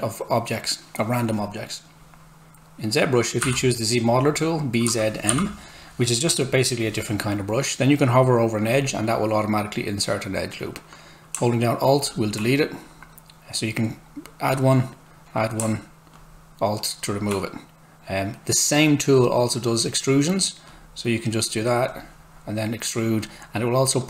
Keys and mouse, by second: 3.4 b, 4.6-5.8 typing, 8.7 click.